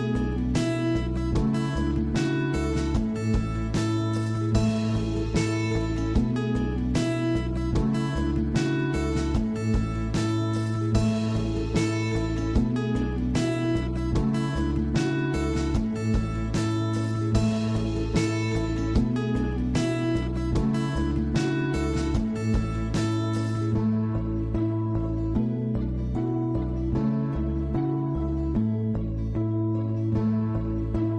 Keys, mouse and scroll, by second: 0.2 shift+middle click, 1.0-1.3 scroll up 7, 1.3 shift+middle drag, 1.6 scroll down 1, 1.9-3.6 middle drag, 3.6 click, 4.5 scroll up 1, 4.7-5.1 shift+middle drag, 5.1-8.1 scroll up 1, 12.7-18.8 drag, 18.8-19.6 scroll down 2, 19.6-21.1 shift+middle drag, 21.1-24.5 drag, 24.5 scroll up 2, 24.7 middle click, 25.2 scroll down 3, 25.5-25.8 middle drag, 25.8 scroll up 1, 26.0-27.3 middle drag, 27.3 scroll down 4, 27.4 scroll up 1, 27.5-30.4 middle drag, 30.4-31.1 drag.